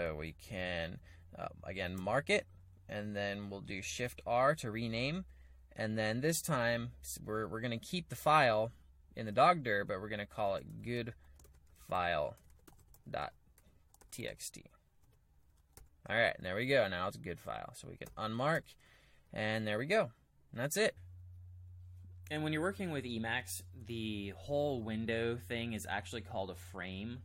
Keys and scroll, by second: 1.9 typing, 3.9 typing, 10.3-16.6 typing, 15.1 Return, 18.0-19.2 typing.